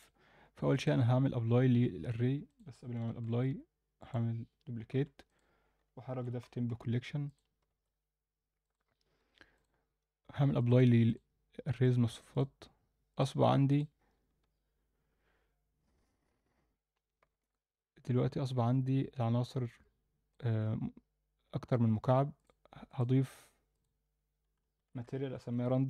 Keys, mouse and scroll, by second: 0.7-2.0 drag, 2.5 click, 3.5 shift+d, 4.9 m, 7.8 ctrl+s, 8.7 click, 9.5 click, 10.5-11.4 drag, 11.8-12.6 drag, 13.1-14.0 drag, 14.9 Tab, 17.4-20.3 alt+middle drag, 22.3 drag, 22.9 click, 23.7-25.8 drag.